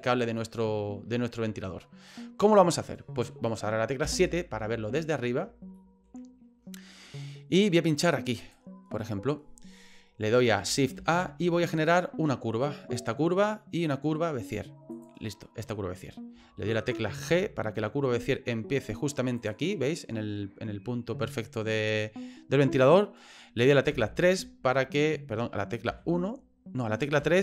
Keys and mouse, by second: 0.4-1.5 middle drag, 4.0 KP_7, 5.7 shift+middle click, 8.4 click, 10.9 shift+a, 17.2 g, 23.9 KP_3, 25.9 KP_1, 27.2 KP_3.